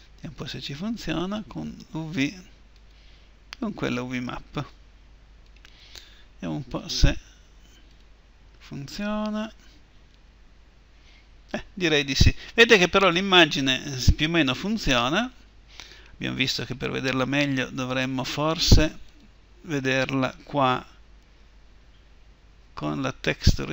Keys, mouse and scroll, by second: 7.7-9.9 drag, 19.3 Escape.